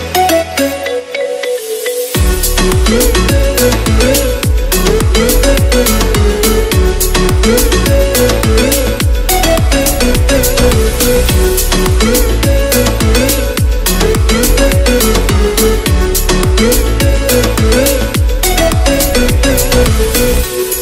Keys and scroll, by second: 14.2 d, 14.7 o, 15.8-19.1 typing.